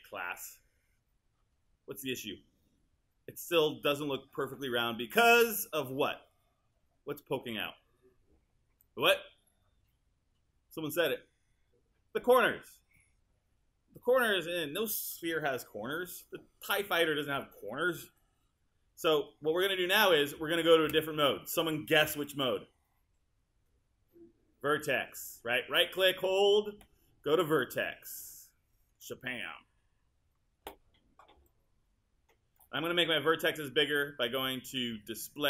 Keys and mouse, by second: 20.9 space, 26.8-29.0 right drag.